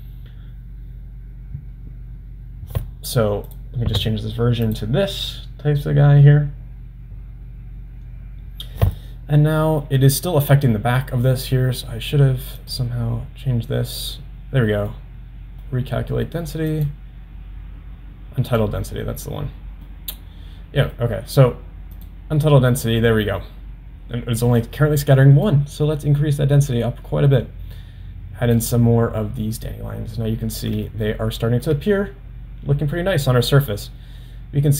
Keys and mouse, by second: 3.5-7.8 drag, 9.0-10.2 middle drag, 13.2 click, 15.1-15.7 middle drag, 16.7-19.2 drag, 20.0-21.0 middle drag, 22.4 drag, 25.6-28.8 drag, 31.2-31.8 shift+middle drag.